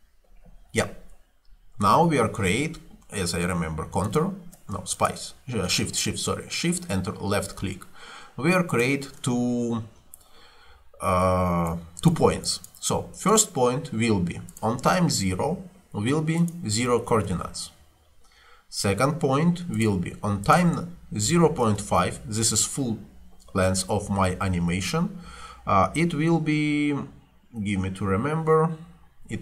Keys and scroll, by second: 15.4 0, 16.9 0, 17.1 Return, 21.0-21.9 typing.